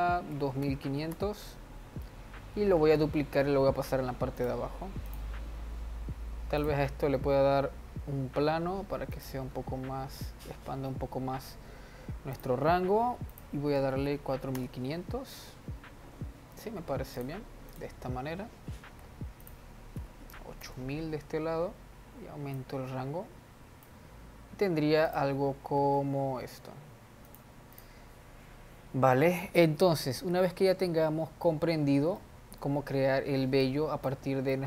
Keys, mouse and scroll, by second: 1.5 0, 3.5 shift+d, 5.6 click, 7.1 click, 8.3 s, 11.1-11.7 scroll down 1, 11.7 scroll up 1, 12.9-14.8 drag, 14.8 0, 17.7 click, 18.2 click, 20.0 click, 20.7 0, 20.8 0, 23.1-25.7 drag, 26.3 g, 28.3 drag, 30.8 scroll up 1, 31.9 scroll up 1, 32.7-34.1 shift+middle drag, 34.1 click.